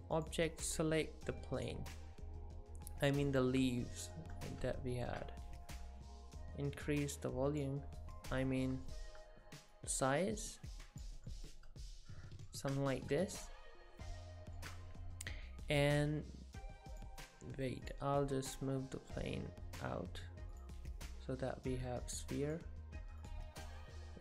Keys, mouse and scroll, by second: 0.2 click, 3.3 middle click, 4.0 shift+middle click, 4.3 middle click, 5.8 click, 7.9-8.3 scroll up 3, 8.2 middle click, 8.9 shift+middle click, 9.7 click, 11.3 middle click, 11.3 scroll up 1, 12.7-13.1 scroll down 5, 13.0 middle click, 16.9 click, 17.8 click, 20.6 click.